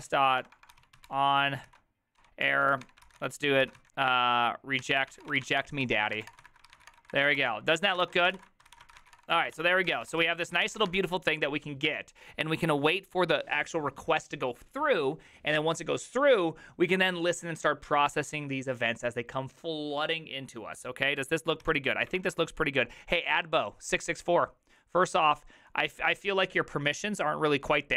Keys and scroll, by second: 0.0-3.8 typing, 1.7 ctrl+y, 2.2 Tab, 4.9 Tab, 4.9-11.3 typing, 6.9 Return, 7.2 ctrl+^, 7.4 ctrl+c, 9.7 ctrl+d, 22.2 alt+{, 22.2 alt++.